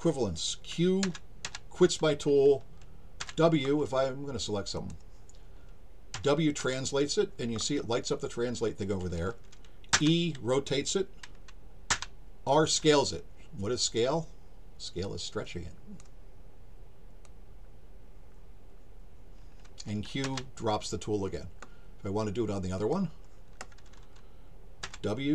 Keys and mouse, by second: 4.8 click, 15.0 click, 17.2-19.8 drag, 22.8 click.